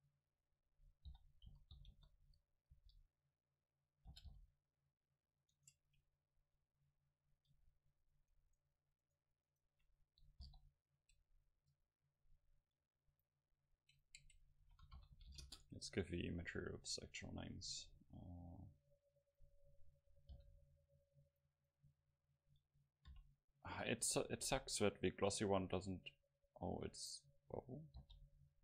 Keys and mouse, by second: 1.1 o, 1.5 s, 4.1 g, 5.6 Tab, 6.1 middle click, 7.6 Tab, 8.1 right click, 10.5 Delete, 11.6 Tab, 13.2-15.8 drag, 17.3-28.2 drag.